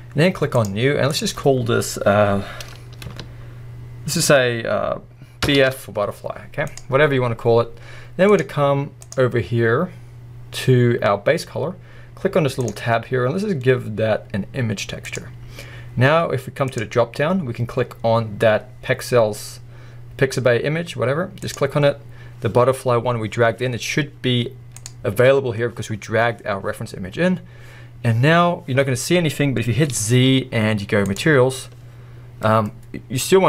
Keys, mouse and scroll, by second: 0.6-6.7 drag, 8.3 click, 12.6-32.7 drag, 28.1-28.8 scroll up 1, 28.8-29.9 scroll down 1, 29.9 z, 32.7-33.4 middle drag.